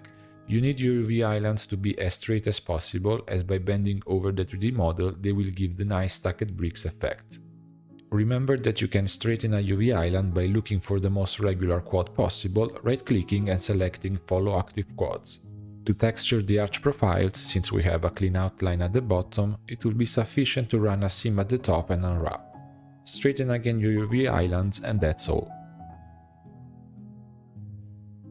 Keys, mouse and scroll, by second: 0.3 middle click, 0.9 u, 1.5-3.9 shift+middle drag, 4.5-6.6 shift+middle drag, 6.9-7.3 scroll up 7, 8.9 click, 9.2 right click, 11.4 click, 11.7 right click, 13.0 click, 13.3 right click, 14.8 click, 15.0 right click, 15.7 right click, 15.8 middle click, 15.9 click, 16.4-18.6 shift+middle drag, 19.3-20.6 middle drag, 20.6 2, 21.1 alt+click, 21.9 ctrl+e, 23.2 a, 23.7 u, 25.5 shift+middle click, 26.0 click, 26.2 right click, 27.6-28.3 scroll down 8.